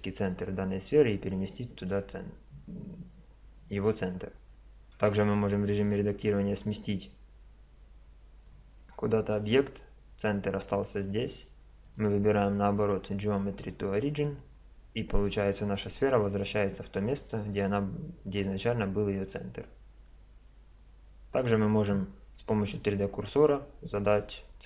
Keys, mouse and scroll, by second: 5.0 Tab, 5.8-7.6 drag, 8.9 Tab, 11.9-13.7 drag.